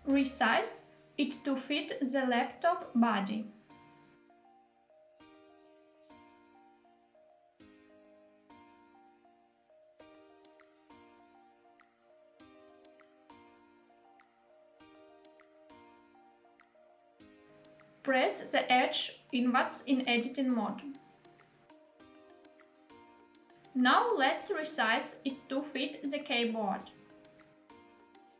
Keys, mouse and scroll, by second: 3.0 click, 3.4-4.1 middle drag, 4.1 g, 4.4 z, 6.8 click, 7.2-7.9 middle drag, 8.0 g, 8.7 y, 11.5 click, 12.4 s, 14.4 click, 14.9-17.4 middle drag, 17.9 Tab, 18.7-19.2 middle drag, 19.4 scroll up 1, 19.8 3, 20.6 click, 21.6 shift+middle click, 21.8 i, 23.2 click, 23.8 s, 26.7 click, 27.7 s, 27.8 y.